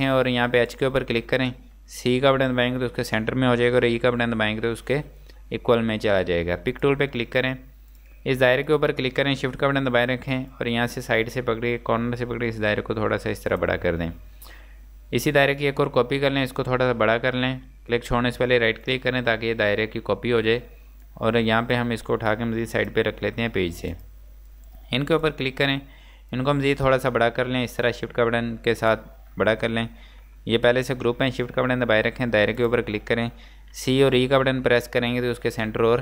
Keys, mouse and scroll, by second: 0.6 shift+click, 2.5 typing, 4.2 typing, 6.4-7.2 typing, 6.8 click, 7.2-7.9 scroll down 1, 7.9 click, 10.6 shift+click, 15.9 shift+click, 18.7 shift+right click, 21.1 click, 26.3 click, 32.6 shift+click, 33.8-34.2 typing.